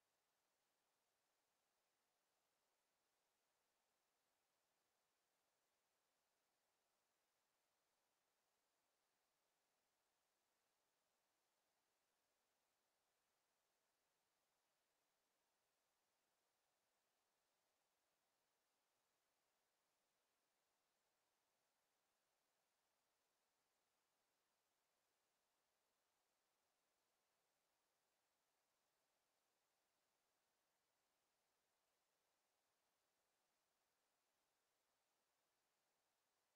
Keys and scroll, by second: 32.6-33.9 typing, 34.0 Return.